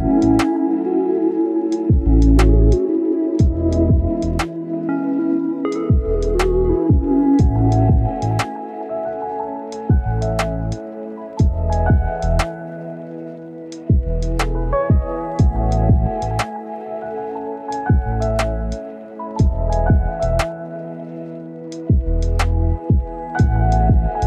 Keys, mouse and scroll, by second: 3.8 scroll down 1, 4.0-4.7 scroll up 2, 4.1 right click, 4.7-16.7 drag, 16.8-17.2 scroll down 1, 17.2-17.8 scroll up 1, 18.7 scroll down 1, 18.9-19.8 scroll up 1, 19.8 click, 22.1 scroll down 1, 22.2 scroll up 1, 22.5 click, 22.7 right click, 23.2 click, 23.4 scroll down 1, 23.5-24.2 scroll up 1, 24.2 scroll down 1.